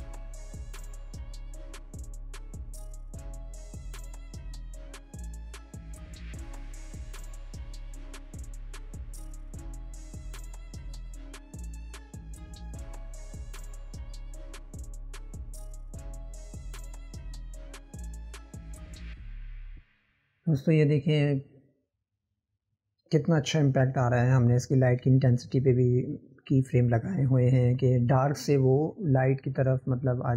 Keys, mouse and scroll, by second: 8.3-10.8 drag, 10.8-12.0 right drag, 12.0-26.7 drag.